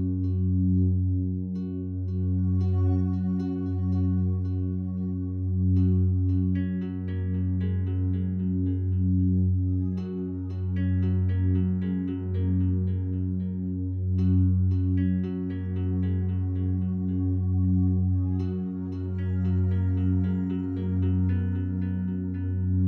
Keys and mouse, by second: 0.4 click, 1.2-1.5 alt+shift+drag, 1.8-2.2 alt+drag, 2.5 ctrl+alt+click, 2.9 alt+shift+drag, 3.8-4.1 alt+drag, 4.8 Tab, 5.6-7.6 alt+drag, 8.3 click, 9.4 click, 10.3 shift+click, 12.0 alt+shift+click, 13.5 alt+shift+click, 14.8 ctrl+alt+click, 15.3-18.7 alt+shift+drag, 22.6 e.